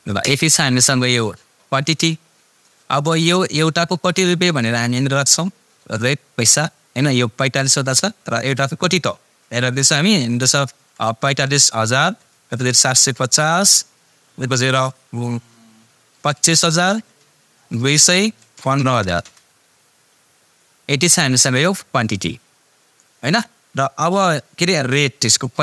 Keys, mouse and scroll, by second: 3.6 click, 7.6 click.